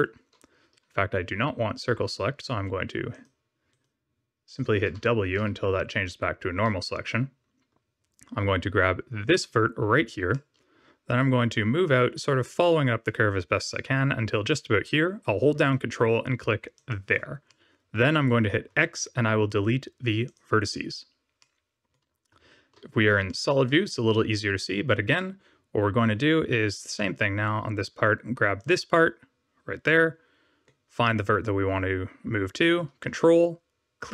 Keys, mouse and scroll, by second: 3.0 click, 3.6 right click, 4.5 click, 4.8 w, 5.3 w, 9.2 click, 10.3 middle click, 16.7 ctrl+click, 17.4 middle click, 18.6 x, 21.3 middle click, 22.2 z, 23.2 shift+middle click, 26.9 middle click, 28.5 click, 29.8 middle click, 33.9 ctrl+click.